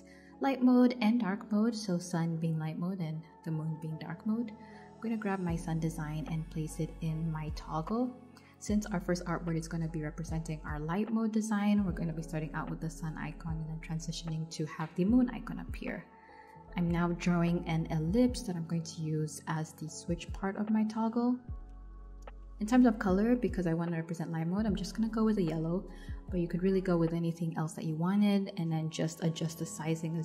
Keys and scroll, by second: 0.7 super+z, 10.1 \, 11.0 BackSpace, 14.2 e, 16.2 v.